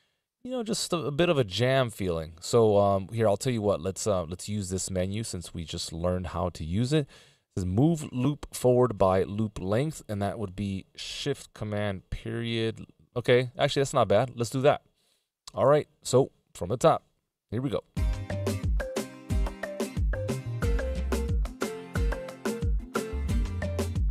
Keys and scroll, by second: 12.0 shift+super+., 12.6 shift+super+,, 13.0 shift+super+..